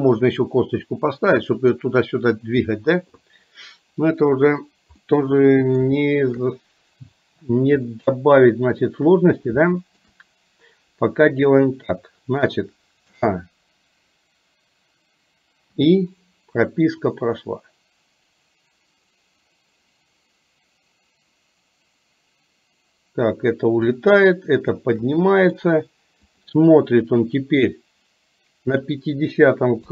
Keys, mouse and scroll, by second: 5.1-6.0 middle drag, 6.1 shift+middle click, 8.0-9.0 middle drag, 9.7-10.1 shift+middle drag, 13.2 a, 15.8 i, 17.2-24.1 drag, 25.3 middle click, 26.5 drag, 28.8 click.